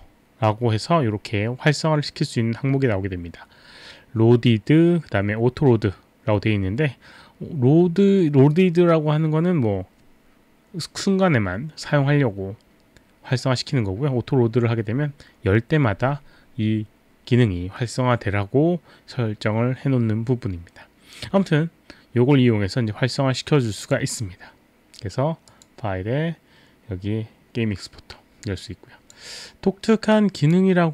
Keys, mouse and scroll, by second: 23.8 click, 25.5 click, 28.6 click, 30.1 click.